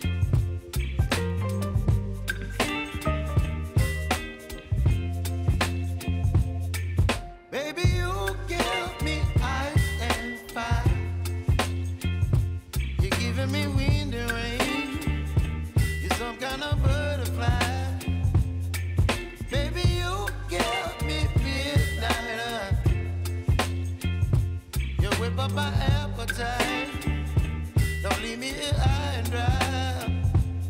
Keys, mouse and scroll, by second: 0.1 F9, 1.0 =, 1.7-7.0 drag, 7.5 space, 9.4 click, 9.8 space, 12.9 click, 15.6 [, 16.4 click, 17.2 [, 17.7 click, 18.7 [, 19.1 click, 20.0 [, 20.5 space, 22.5 click, 22.9 space, 30.0 click.